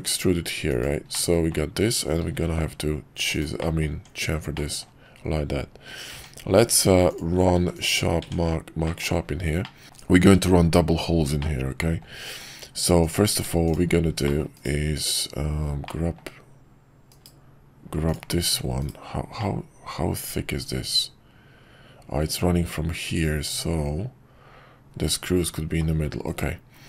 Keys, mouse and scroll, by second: 1.2 middle click, 2.3 ctrl+b, 3.7 middle click, 3.9 Tab, 4.5 middle click, 7.5 q, 8.2 Tab, 8.8 middle click, 9.6 middle click, 11.4-12.0 middle drag, 14.2 middle click, 15.8-16.2 middle drag, 17.1 /, 18.0 click, 19.4-25.8 middle drag.